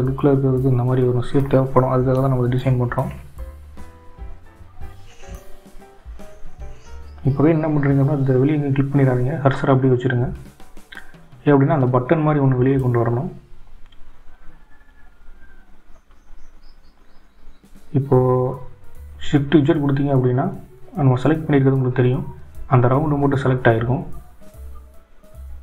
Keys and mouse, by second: 16.3 click, 18.8 shift+z.